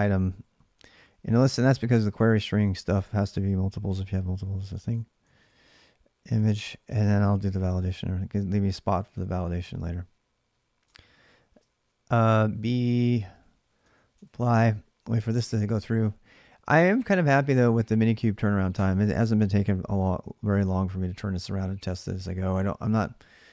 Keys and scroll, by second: 0.0-8.1 typing, 2.2 ctrl+[, 8.9 ctrl+a, 9.1 ctrl+a, 10.6 Return, 11.6-13.9 typing.